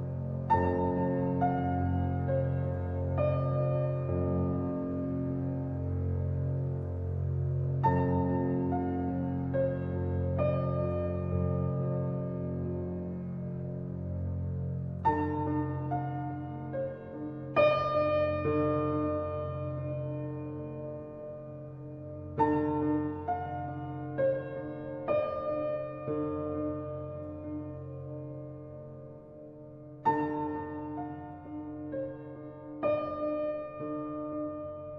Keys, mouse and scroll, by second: 0.5-1.7 middle drag, 1.7 Tab, 2.3 click, 2.8 shift+middle click, 3.1 scroll up 1, 3.4-4.9 middle drag, 4.9 scroll up 1, 5.2-5.7 shift+middle drag, 5.7-7.2 scroll up 1, 7.2-10.3 drag, 10.7 click, 12.0 click, 12.7-13.6 right drag, 13.6-14.1 shift+middle drag, 14.1-14.7 scroll up 2, 14.7-15.0 scroll down 1, 15.0-16.5 middle drag, 16.5-17.3 scroll up 2, 17.3-18.1 shift+middle drag, 18.1 Tab, 19.4 ctrl+r, 24.8 ctrl+z, 25.8-26.9 shift+middle drag, 26.9 ctrl+r, 31.8 click, 32.5 Tab, 32.7 click, 33.8 click, 34.4 click, 34.6-34.9 right drag.